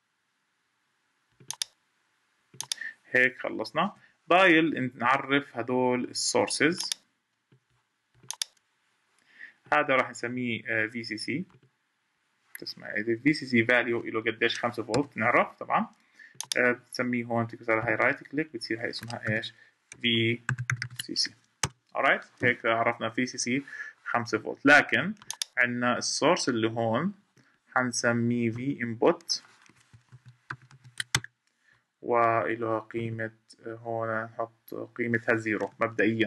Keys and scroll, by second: 3.6 Escape.